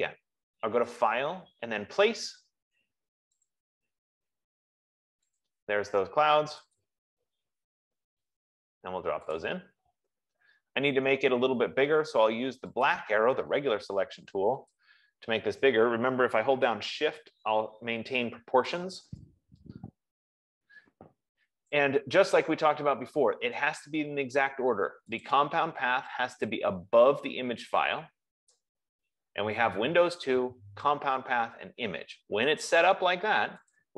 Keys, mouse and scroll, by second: 1.5 click, 3.8 click, 5.9 click, 7.1 click, 9.8 click, 13.3 click, 19.0 shift+click, 21.9 click, 25.8 click, 28.7 click.